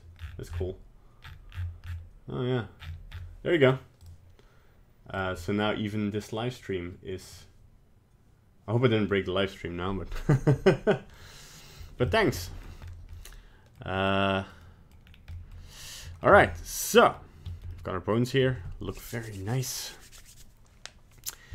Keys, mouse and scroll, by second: 11.1 middle click, 12.0 shift+middle click, 12.4 middle click, 12.8 scroll up 2, 13.1 middle click, 14.0 middle click, 14.4 middle click, 14.6 middle click, 15.0 scroll down 2, 15.3 middle click, 15.4 middle click, 15.7-16.0 scroll up 1, 16.0 middle click, 16.4 ctrl+Tab, 16.9 middle click, 17.4 shift+middle click, 17.7 middle click.